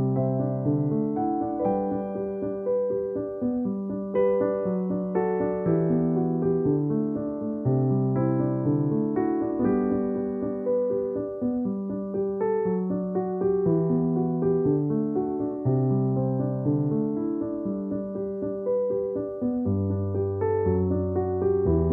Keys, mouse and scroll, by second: 0.0-0.8 typing, 0.5 click, 1.4 click, 2.0 ctrl+=, 2.4 ], 2.9 ctrl+=, 4.7 alt+click, 9.2 space, 9.4 click, 9.5 space, 10.7 ctrl+-, 11.3-13.6 typing, 11.4 click, 12.1 ctrl+=, 13.4 click, 14.7 alt+click, 16.7 alt+click, 16.8 alt+click, 18.6 alt+click, 20.1 space, 20.2 click, 20.4 space, 21.3 alt+click.